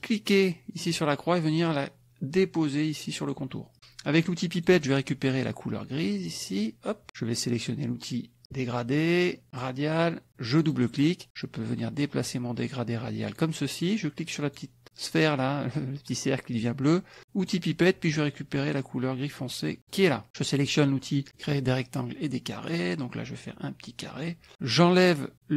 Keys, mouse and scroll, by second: 0.0-3.7 drag, 4.6 click, 6.4 click, 8.4 click, 9.5 click, 10.6 click, 11.4-13.5 drag, 14.5 click, 17.4 click, 19.9 click, 21.3 click, 22.7-24.4 drag.